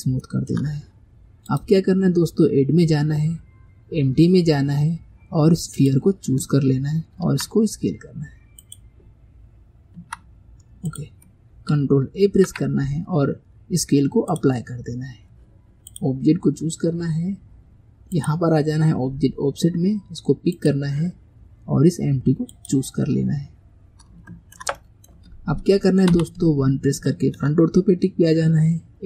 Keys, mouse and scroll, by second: 0.3-1.5 shift+middle drag, 1.5-4.7 drag, 7.3 s, 10.0 s, 12.3 ctrl+a, 15.9 click, 18.2-19.6 drag, 20.6-23.5 drag, 24.3-26.2 shift+middle drag, 26.2 KP_1.